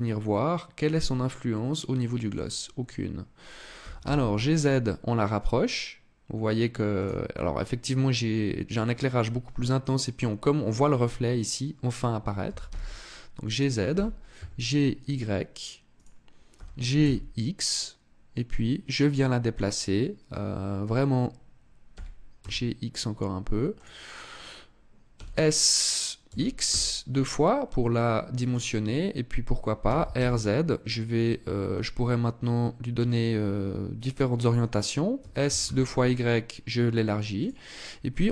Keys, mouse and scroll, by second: 1.8 click, 2.1-2.9 scroll up 2, 3.4 g, 6.7 click, 12.1 g, 13.2 click, 13.5 g, 15.8 click, 16.2 g, 19.4 click, 21.6 g, 23.5 click, 24.8 s, 28.1 click, 29.5 r, 34.1 click, 34.8 s, 37.1 click, 38.2 g.